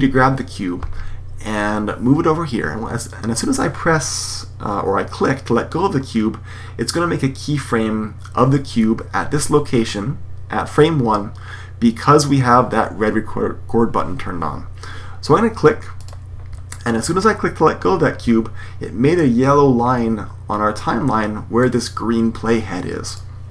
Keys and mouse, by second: 21.5-23.5 drag.